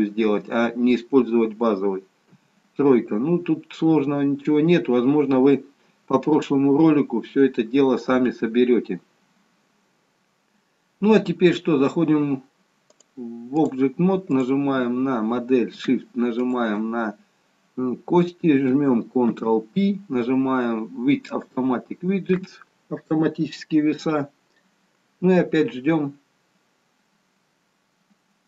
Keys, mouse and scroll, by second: 2.4 KP_3, 4.1-5.2 scroll down 1, 5.2 scroll down 1, 9.3-9.8 scroll up 1, 9.8-12.2 scroll down 1, 13.1 click, 14.5 click, 16.6 shift+click, 19.6 ctrl+p.